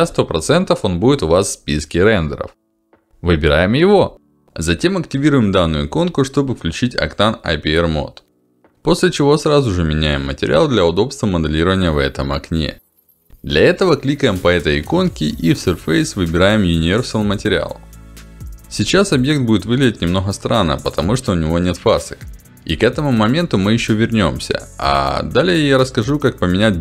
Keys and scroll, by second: 0.2 ctrl+alt+d, 5.6 ctrl+alt+d, 14.3 ctrl+alt+d, 16.7 ctrl+alt+d.